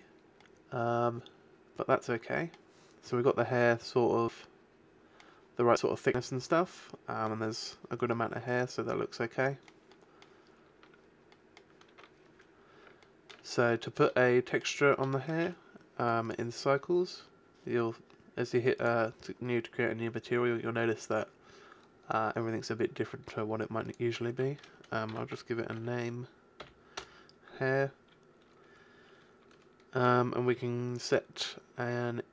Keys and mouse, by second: 5.1-7.3 drag, 8.0-10.0 drag, 13.9-16.2 drag, 22.3-24.5 drag, 28.8-32.2 drag.